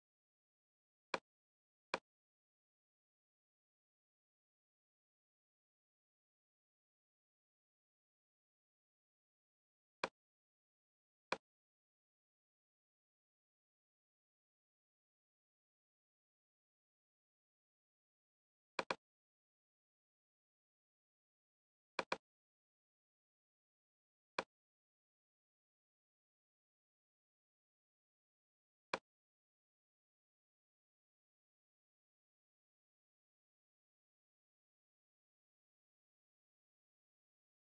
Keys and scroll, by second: 31.5 super+j.